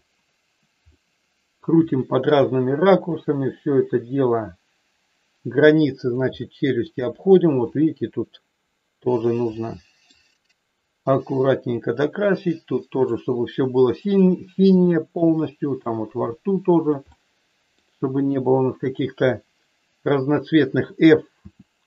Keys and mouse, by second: 0.8 middle click, 1.9 shift+middle click, 3.2-6.2 drag, 6.4 middle click, 7.7-9.3 drag, 9.6 middle click, 10.8 click, 11.8-13.2 drag, 13.6 click, 14.9 shift+middle click, 15.8-16.9 drag, 17.2 middle click, 18.6 click, 21.3 f.